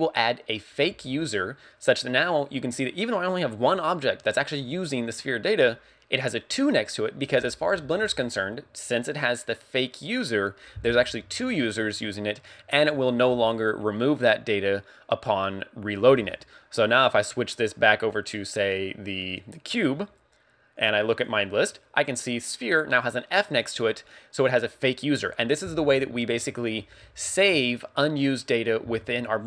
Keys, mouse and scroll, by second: 17.6 click, 20.8 click, 21.1 click.